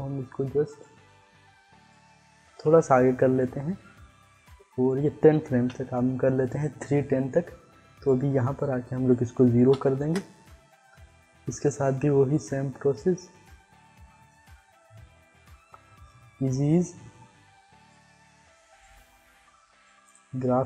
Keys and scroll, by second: 2.5 [, 5.6 [, 9.7 0, 9.9 Return.